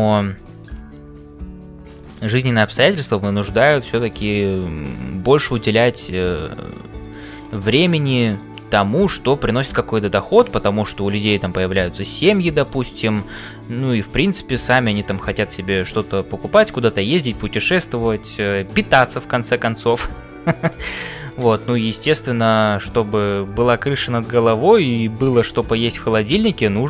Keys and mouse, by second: 0.0-26.8 typing, 0.3 middle click, 2.0 middle click, 2.5-3.8 middle drag, 7.0 click, 10.9 click, 12.5 click, 14.2 click, 18.4 click, 21.4 click, 22.9 click, 25.9 click.